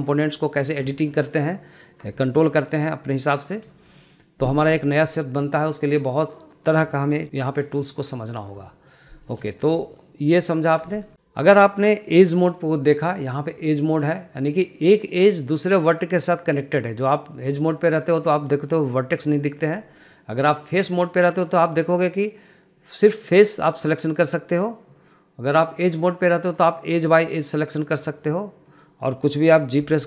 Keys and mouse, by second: 0.2 middle click, 1.0 middle click, 1.6 shift+middle click, 2.5 shift+middle click, 4.4 shift+middle click, 5.1 shift+middle click, 5.5 shift+middle drag, 7.6 shift+middle click, 9.0 shift+middle click, 9.4 shift+middle click, 9.9 middle click, 10.2 shift+middle click, 10.5 shift+middle click, 13.7 click, 14.6 middle click, 20.0 middle click, 21.2 click, 21.7 middle click, 23.6 click, 24.6 click, 26.2 click, 28.2 click, 29.1 drag.